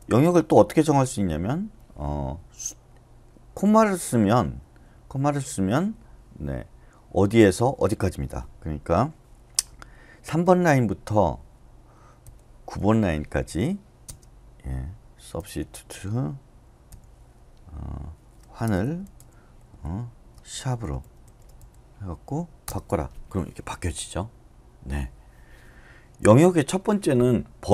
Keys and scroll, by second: 10.2 typing, 12.0-12.8 typing, 14.0 space, 15.4 typing, 16.9 /, 18.6-21.6 typing, 22.6 Return, 26.2 u.